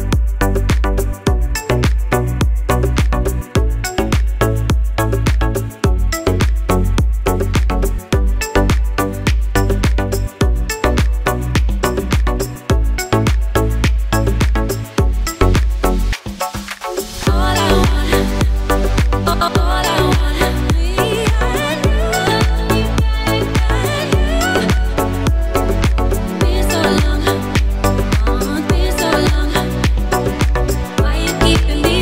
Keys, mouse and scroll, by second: 2.6 alt+scroll up 2, 2.9 alt+scroll down 1, 3.2 alt+scroll up 2, 3.4 space, 3.5 click, 3.6 space, 3.8-4.1 alt+scroll down 2, 4.2 alt+right click, 4.5 click, 6.3-7.3 alt+scroll up 4, 6.5 alt+right click, 7.3 click, 10.6 right click, 10.6 alt+scroll up 2, 10.8 click, 13.9 alt+right click, 14.0 alt+scroll up 2, 14.2 click, 16.3 right click, 16.4 click, 18.0-18.7 alt+scroll down 3, 18.8 alt+scroll up 1, 19.2 alt+right click, 19.5 alt+scroll up 1, 19.6 alt+right click, 20.2 click, 23.0 alt+scroll down 1, 23.7 alt+scroll up 2, 24.0 alt+right click, 24.6 click, 25.5 right click, 25.5 click, 28.7 alt+right click, 28.9 alt+scroll up 2, 29.2 alt+right click, 29.4 click, 31.5 click, 31.9 click.